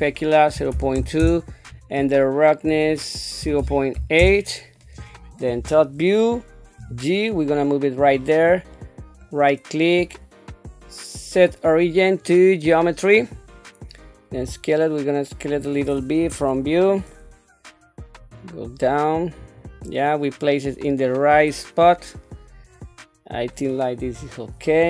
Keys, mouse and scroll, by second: 0.2 click, 2.7-4.2 drag, 5.5 KP_7, 6.8 g, 9.2 right click, 9.8-12.2 drag, 12.2-13.4 right drag, 14.4 s, 16.2 KP_1, 18.3-19.4 drag, 19.8-22.9 middle drag, 23.0 middle click, 24.0 KP_7.